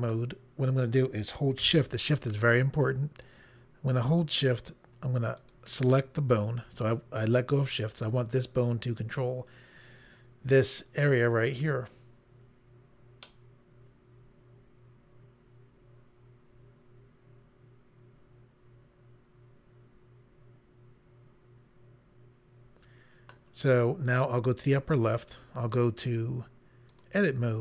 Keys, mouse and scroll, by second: 5.4 shift+click, 13.2 middle click, 25.0 click, 26.9 click.